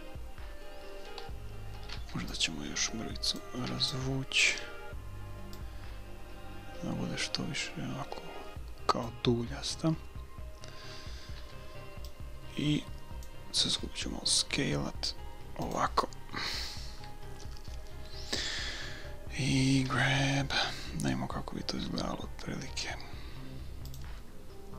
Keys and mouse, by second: 1.8 a, 1.9 b, 3.7 b, 5.6-7.6 drag, 11.5 b, 12.5 click, 13.7 s, 19.9 g, 24.5 middle click.